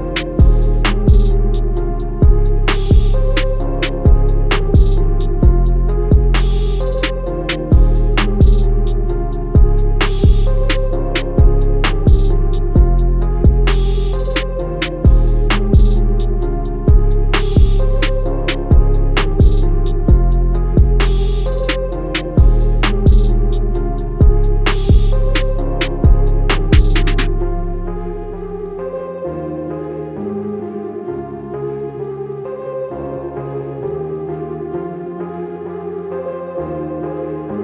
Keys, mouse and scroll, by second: 0.2 click, 5.3 click, 9.0 click, 11.0 click, 16.2 a, 16.5 click, 18.0 right click, 20.3 click, 23.8 a, 24.0 click, 29.2 click, 30.6 i, 31.2 click, 31.7 a, 32.0 click, 34.3 i, 35.0 click, 35.4 a, 35.5 click, 37.2 i.